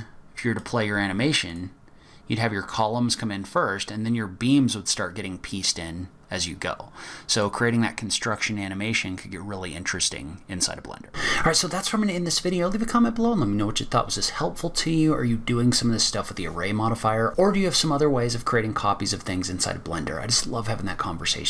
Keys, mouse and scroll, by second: 0.3 click, 1.5 click, 7.3 click.